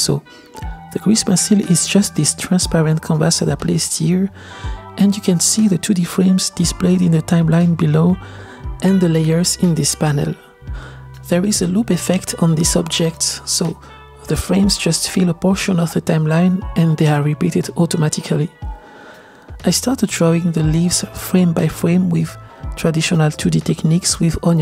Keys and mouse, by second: 1.6 space, 2.1-3.8 middle drag, 4.3-4.8 shift+middle drag, 4.5 shift+s, 5.8-6.7 middle drag, 7.2-8.3 drag, 8.4 click, 9.1 middle click, 10.3 click, 11.0 middle click, 12.3-12.7 drag, 13.7 click, 14.3 drag, 14.7 middle click, 16.4 click, 16.8 click, 18.0 KP_0, 19.2-21.7 drag, 22.5-24.6 drag.